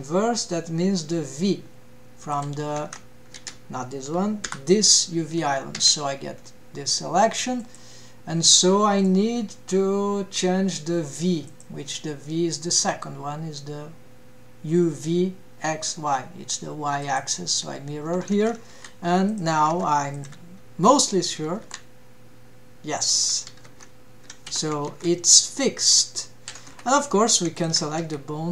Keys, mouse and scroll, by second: 2.3 click, 2.8 Tab, 3.3 alt+a, 4.4 l, 5.8 a, 6.3-6.8 scroll down 2, 6.8-7.2 scroll up 1, 7.5 click, 11.4-17.2 drag, 18.3 ctrl+Tab, 19.3 click, 19.9 ctrl+Tab, 20.1 click, 21.4 g, 23.4 g, 24.9 g, 27.5 shift+drag, 28.0 s.